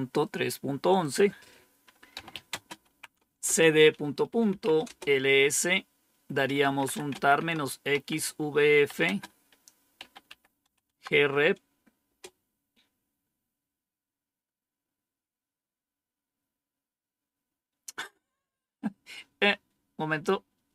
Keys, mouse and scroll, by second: 0.9 click, 1.8-5.1 typing, 6.1-10.5 typing, 10.8 Tab, 11.7-12.5 typing.